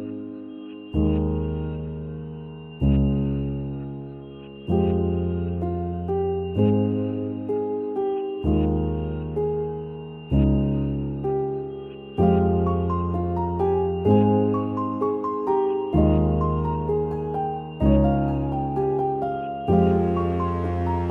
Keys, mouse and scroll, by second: 2.5 click.